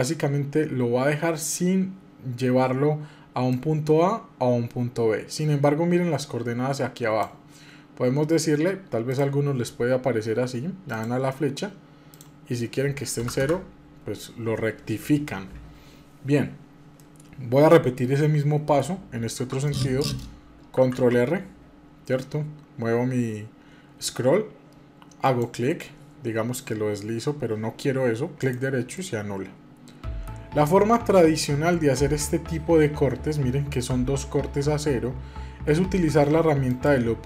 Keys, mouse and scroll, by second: 3.5-15.3 drag, 17.0-20.0 middle drag, 20.8 ctrl+r, 29.0-32.1 middle drag, 36.7-37.2 drag.